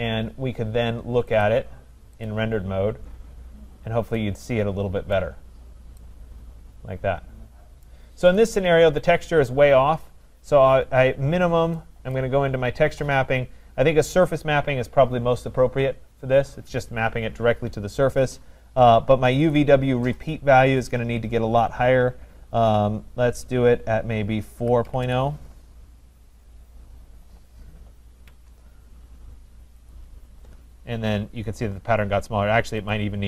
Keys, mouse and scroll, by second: 2.3 click, 3.7 scroll, 5.1 right click, 5.5 scroll, 7.2 middle click, 8.0 right click, 8.4 click, 12.2 click, 14.7 click, 19.6 click, 20.2 click, 24.4-25.5 typing, 28.3 Tab, 29.9 click, 30.9-32.1 scroll up 5, 32.1-32.9 scroll, 33.0 click.